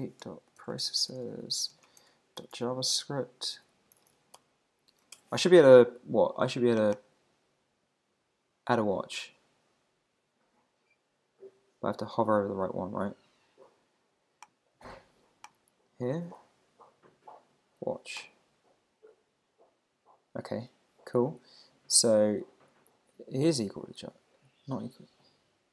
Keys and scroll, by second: 5.1 super+BackSpace.